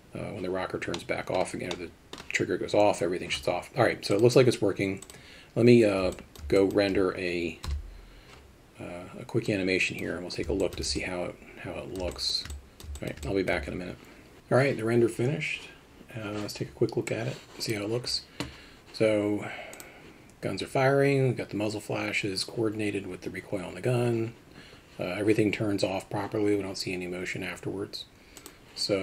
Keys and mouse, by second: 1.0-1.4 middle drag, 1.7-2.2 middle drag, 4.1 click, 6.2 alt+middle click, 6.6 alt+shift+middle drag, 7.7 KP_0, 9.5 click, 10.6 alt+shift+middle click, 11.0-12.0 ctrl+alt+middle drag, 12.1 alt+shift+middle drag, 12.5 alt+middle click, 13.0 alt+shift+click, 13.2 alt+click.